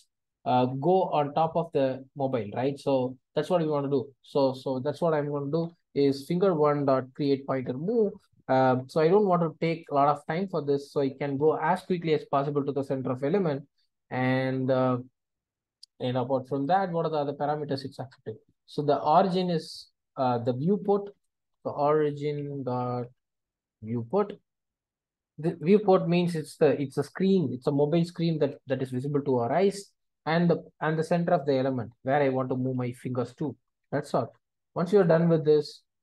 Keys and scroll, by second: 7.5 Return, 16.7 super+b, 32.7 Return.